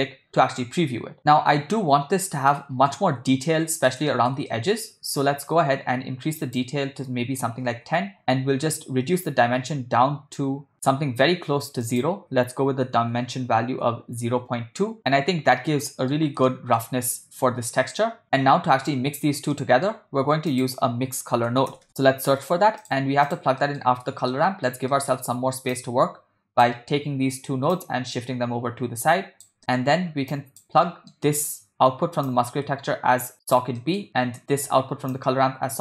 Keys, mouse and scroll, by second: 2.6-2.9 ctrl+middle drag, 3.5-3.9 ctrl+middle drag, 4.1 shift+middle drag, 4.5 ctrl+middle click, 6.4-7.9 drag, 8.8-11.8 drag, 12.0-13.8 drag, 15.0 click, 15.7-16.1 ctrl+middle drag, 16.5-16.8 shift+middle drag, 19.6 middle click, 20.1 shift+a, 23.6 middle click, 24.3 ctrl+middle click, 24.9 middle click, 25.8-26.6 drag, 27.8-29.5 drag, 29.6 ctrl+middle click, 30.4 click, 30.8 middle click, 32.3-33.7 drag, 33.8 middle click, 35.2-35.8 drag.